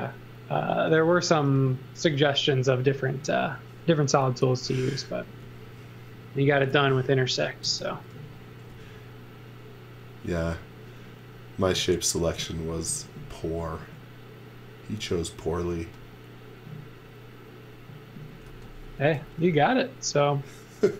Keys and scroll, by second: 3.4 e, 6.6 x, 7.6 space, 8.7 f, 12.3 z, 12.8 x, 13.7 a, 18.4 x, 19.1 z.